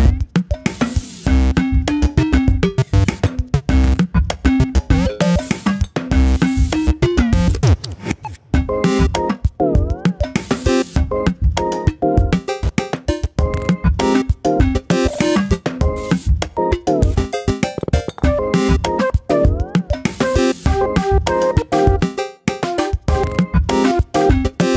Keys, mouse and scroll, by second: 0.2 scroll up 3, 0.4 shift+middle click, 0.6 shift+click, 1.2 i, 3.0 click, 3.3 middle click, 4.0 click, 4.7 Delete, 5.2 scroll down 2, 5.4 middle click, 5.9 click, 6.0-7.3 middle drag, 7.3 KP_7, 7.6-8.0 scroll up 2, 8.0-9.3 drag, 9.6 click, 10.5 click, 10.9 click, 12.3 scroll down 3, 12.5 middle click, 12.8 scroll up 2, 13.0-14.0 middle drag, 14.0 click, 14.6 middle click, 14.8 shift+click, 15.2 middle click, 17.3 Delete, 17.7-18.0 scroll down 1, 18.0-19.2 middle drag, 19.2 shift+click, 19.6 middle click, 19.9 shift+click, 20.9 ctrl+click, 21.3 Delete, 22.1 scroll down 1, 22.2 middle click, 22.7 scroll up 3, 22.8 shift+middle click, 23.6 click, 24.2 click, 24.6-24.7 scroll down 1.